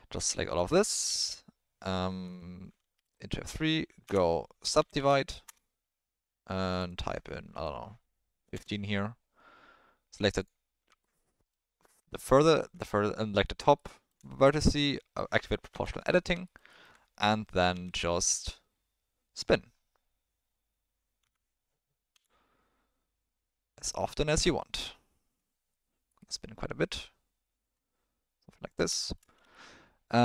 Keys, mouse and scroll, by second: 0.3 ctrl+middle click, 1.0 ctrl+e, 3.0 F3, 6.7-8.5 drag, 10.4 click, 11.9 middle click, 13.7 shift+middle click, 15.7 o, 17.7 r, 22.1 r, 29.1 shift+middle click, 29.5 ctrl+middle click.